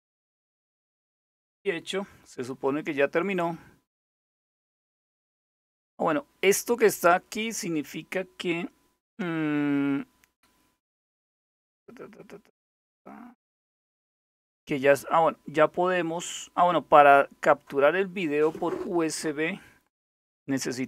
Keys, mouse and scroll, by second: 3.0 click, 3.6 scroll down 2, 9.4-9.9 scroll down 2, 9.9-10.3 scroll up 2, 16.1 click.